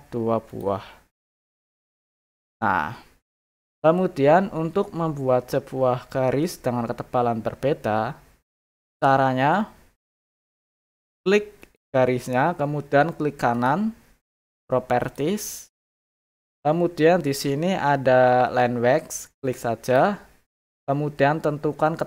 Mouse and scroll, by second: 0.5 click, 2.0 click, 11.6 click, 13.5 right click, 15.0 click, 19.4 click, 19.8 click, 20.6 middle click, 20.8 middle click, 20.8 scroll.